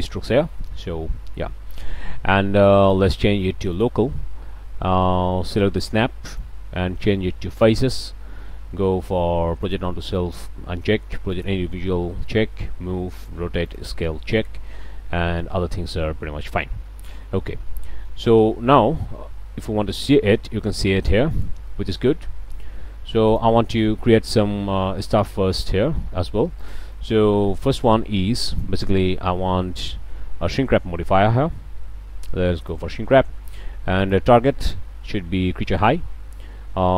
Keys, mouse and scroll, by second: 2.8-3.1 drag, 3.7 drag, 5.8 click, 6.3 click, 7.5 click, 9.6 drag, 13.2-13.5 drag, 13.7 click, 17.8-18.2 drag, 18.4-19.0 drag, 19.6 s, 21.3 click, 21.7-22.2 drag, 23.3 drag, 24.0-25.3 drag, 25.4 s, 26.6 drag, 26.9 click, 28.5 click, 32.6 drag, 34.0 click, 35.8 click.